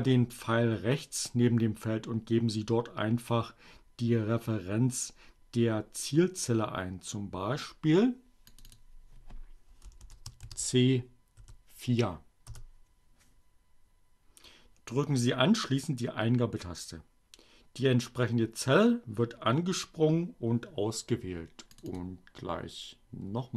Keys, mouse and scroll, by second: 8.3 click, 8.7 BackSpace, 10.5 shift+c, 11.1 4, 11.8 Return, 21.2 click.